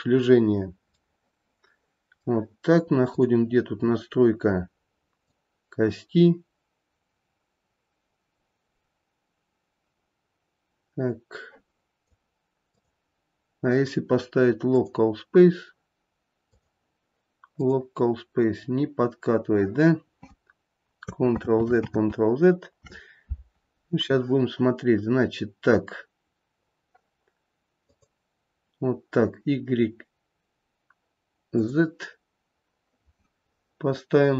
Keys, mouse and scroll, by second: 0.0 ctrl+shift+c, 1.0 middle click, 1.6 middle click, 3.1 click, 5.2 click, 12.8 click, 16.6 click, 21.5 ctrl+z, 22.0 ctrl+z, 28.1 click, 31.7 click.